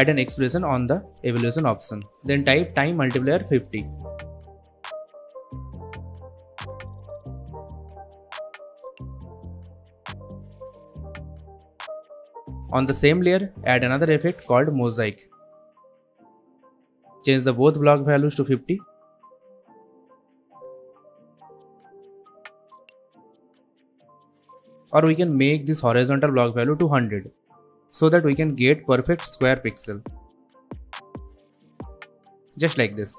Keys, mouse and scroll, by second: 0.6-1.7 typing, 3.6-6.9 drag, 13.8-14.9 typing, 15.7 click, 17.9 click, 19.0 Return, 20.1 click, 21.1 Return, 22.3-23.6 drag, 24.4-25.8 scroll up 1, 25.8-27.4 drag, 28.7 Return, 30.1-30.9 drag.